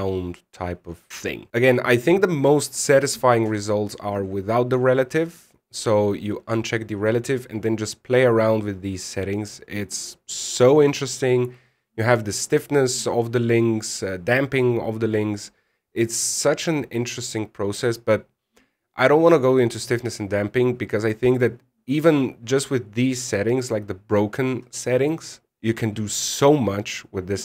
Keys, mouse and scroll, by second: 6.3 click, 7.3 click, 7.9-8.6 scroll down 3, 8.6 click, 15.6-16.2 scroll up 6, 16.8 click, 18.9-19.8 scroll down 5, 23.1-25.5 scroll down 2, 25.5-26.3 scroll up 2, 27.0-27.4 scroll up 3.